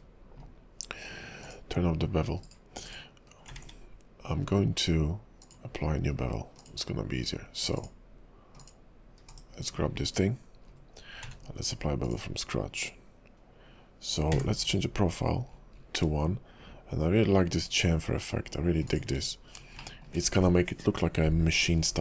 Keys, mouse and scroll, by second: 3.5-4.3 scroll up 2, 3.6 ctrl+`, 7.0-7.8 scroll up 3, 7.8 click, 8.6 click, 9.3 /, 9.8-10.9 scroll up 8, 10.9-11.3 scroll down 1, 11.3 q, 19.3-20.0 scroll down 6, 20.0 shift+middle click, 20.3-21.8 scroll up 3, 21.8-22.0 scroll up 2.